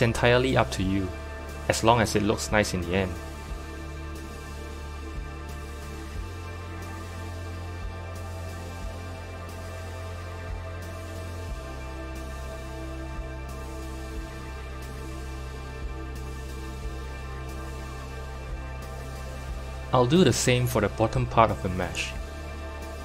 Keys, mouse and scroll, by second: 1.9 g, 4.2 s, 9.0 r, 16.4 z, 19.2 click, 22.0 u.